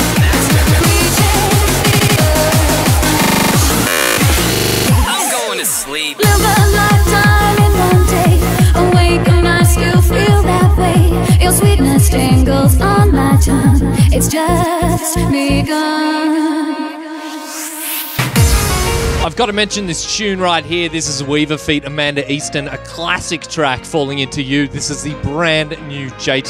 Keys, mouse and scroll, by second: 0.6 a, 14.3-15.6 middle drag, 17.8-21.0 right drag, 21.1 click, 21.6 a, 22.0 a, 22.6 a, 22.8 click, 23.4 click.